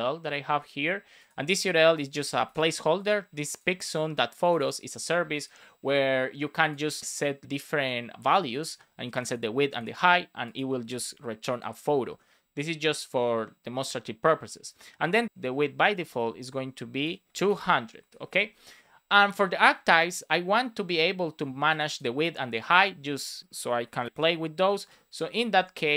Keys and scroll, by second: 0.7 super+c, 2.4 super+v, 11.9 Return, 15.2 Left, 15.7 Right, 17.2 shift+;, 17.3 space, 18.2 super+s, 24.8 Escape, 25.0 Down, 25.2 Left.